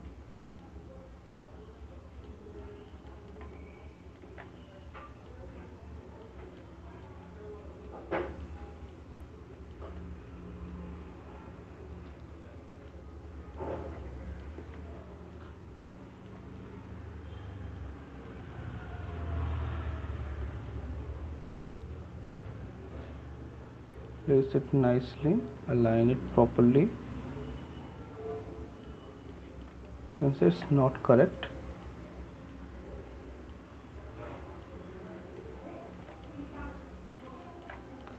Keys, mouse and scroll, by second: 0.4 shift+click, 2.3 click, 2.9 click, 3.4 shift+click, 4.8 right click, 6.3 click, 7.3 alt+click, 8.7 click, 10.9 shift+click, 13.0 click, 14.8 shift+click, 16.4 click, 18.0 click, 19.3 click, 20.6 click, 26.3 click, 30.5 alt+click, 30.7 right click, 31.4 right click, 31.9 click, 33.5 click, 36.0 right click, 36.4 right click, 37.2 shift+click, 37.8 alt+click.